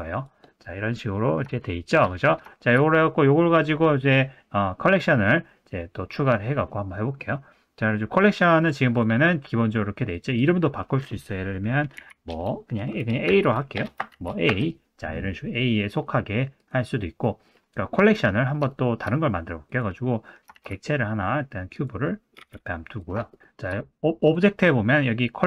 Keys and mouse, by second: 0.1 click, 0.6-1.4 middle drag, 1.6 shift+middle drag, 2.1 middle click, 5.0 middle click, 6.7 middle click, 8.6 click, 8.9 click, 10.1 click, 10.5-14.6 drag, 17.2 middle drag, 18.1 middle drag, 18.7 shift+middle drag, 19.1 middle click, 19.7 click, 20.5 shift+a, 22.3 g, 23.3 shift+middle click, 24.3-25.4 drag.